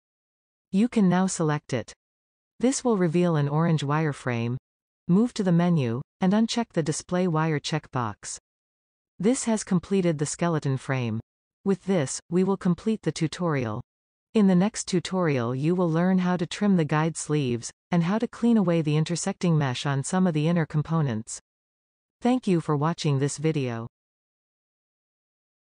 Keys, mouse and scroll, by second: 0.9-2.3 drag, 7.5 click, 10.0-10.4 scroll down 1, 10.4-16.6 middle drag, 16.6-17.5 scroll up 2, 17.5-19.2 shift+middle drag, 19.2-19.9 scroll up 5, 19.9-22.4 middle drag, 22.7-23.3 scroll down 2, 23.3 middle click, 24.1-24.8 scroll down 3, 25.1 middle click.